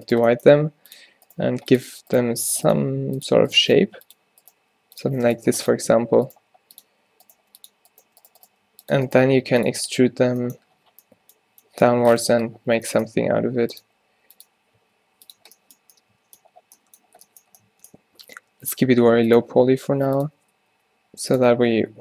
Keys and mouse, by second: 0.5 g, 1.4 g, 2.8 right click, 3.9-9.2 typing, 13.1 click, 13.6 s, 13.9 e, 14.9 s, 15.5 z, 18.3-22.0 typing.